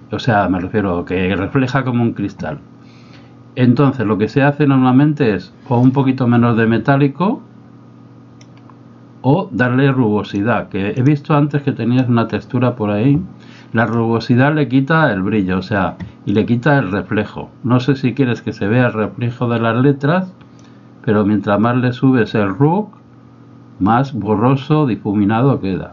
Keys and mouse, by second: 5.8-8.6 drag, 10.3 click, 12.1-14.0 drag, 20.7-22.3 drag.